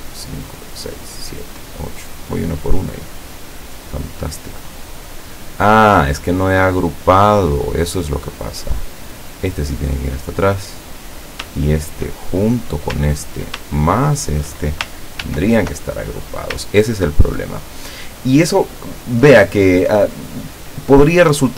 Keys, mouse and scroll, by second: 0.0 click, 0.5 click, 1.1 click, 1.6 click, 3.0 click, 3.4 click, 4.1 click, 4.5 click, 5.0 click, 6.3 click, 9.8 click, 11.0 click, 11.8 shift+click, 12.4-12.9 shift+scroll down 3, 13.9 ctrl+shift+click, 15.3 ctrl+g, 16.3 scroll up 2, 17.1 ctrl+scroll down 2, 18.0 scroll up 2, 18.5 scroll down 2.